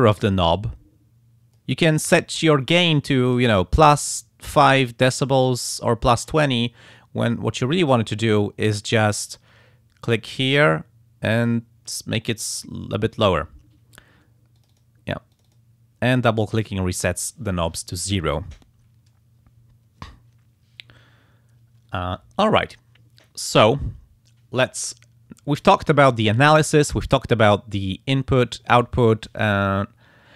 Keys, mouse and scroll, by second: 3.3 click, 4.5 click, 5.1 click, 8.3-9.6 drag, 10.2-12.1 drag, 14.6 click, 15.3 click.